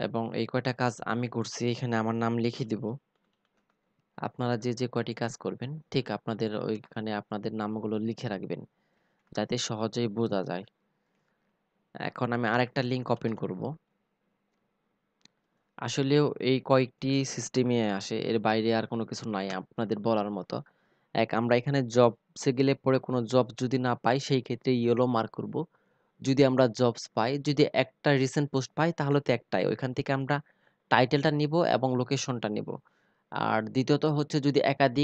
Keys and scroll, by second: 5.1 ctrl+c, 7.6 ctrl+v, 11.5 ctrl+c, 15.7 ctrl+v.